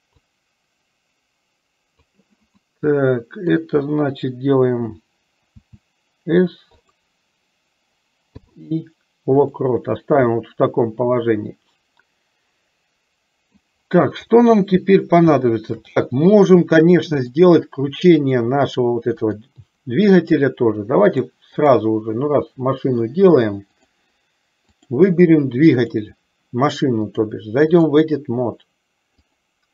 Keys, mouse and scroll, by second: 0.5-2.2 drag, 2.7-3.7 middle drag, 5.6 s, 8.5 i, 10.5-13.7 middle drag, 15.5 shift+middle click, 16.2-17.5 middle drag, 18.3 middle click, 19.4 click, 21.1 click, 24.0 click, 24.7 click, 25.9 click, 27.4 click, 29.2 click.